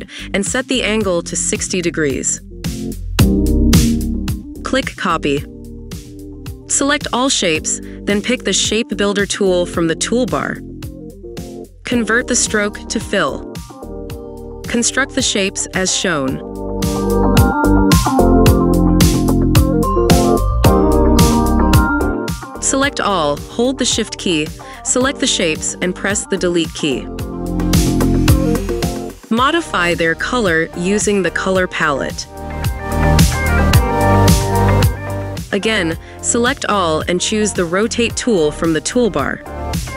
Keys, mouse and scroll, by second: 7.0 double click, 25.2 shift+click, 27.3 Delete, 31.4 ctrl+click, 33.9 double click.